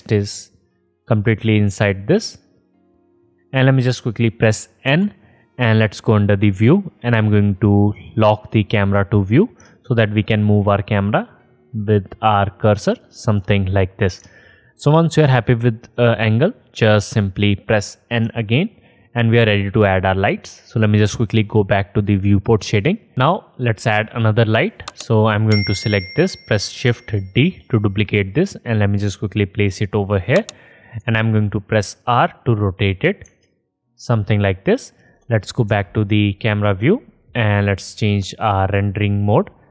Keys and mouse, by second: 5.1 n, 6.9-9.1 drag, 9.1 middle click, 9.3-10.8 drag, 15.2 alt+shift+click, 18.5 n, 22.4 click, 22.4 middle click, 22.4 right click, 22.5-25.4 drag, 25.4 middle click, 25.5-27.1 drag, 27.6 shift+d, 28.1-29.1 drag, 29.8-31.3 drag, 31.3 r, 35.9 KP_0, 38.0 click, 38.0 middle click, 38.0 right click.